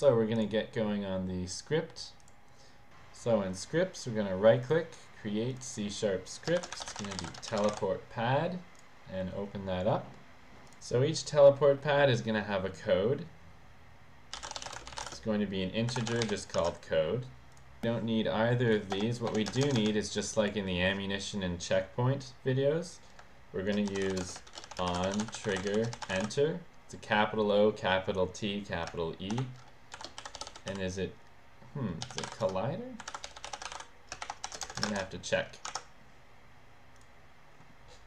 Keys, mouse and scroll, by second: 0.4 click, 3.6 right click, 4.6 right click, 5.5 right click, 5.6 click, 6.4-7.7 typing, 10.7 click, 14.2-16.5 typing, 17.5 click, 17.8 click, 19.0 BackSpace, 19.3 BackSpace, 19.6 Return, 19.8 Return, 19.9 Return, 20.1 click, 20.4 click, 23.7-26.6 typing, 29.4-35.8 typing, 37.0 click.